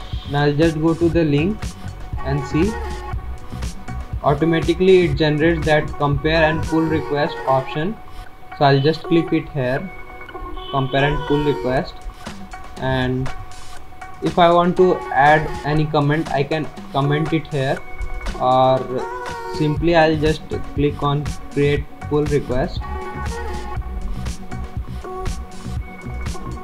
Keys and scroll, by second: 1.5 alt+Tab.